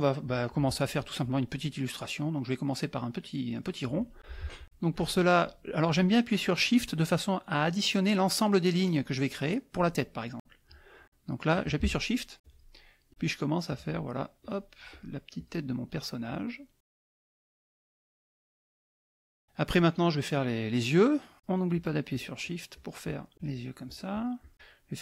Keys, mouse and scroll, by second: 12.4 shift+click, 13.6 shift+click, 14.0 shift+middle click, 14.4 shift+click, 14.9 shift+click, 15.4 shift+click, 15.8 shift+click, 16.2 shift+click, 17.6 shift+click, 18.0 shift+click, 21.4 shift+click, 21.7 shift+click, 23.8 shift+click.